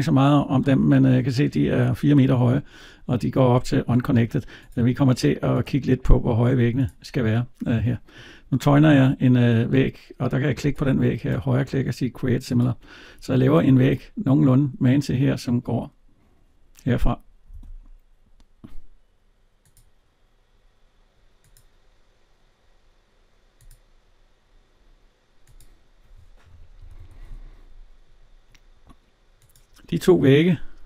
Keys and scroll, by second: 13.4 alt+Tab, 26.6 Escape.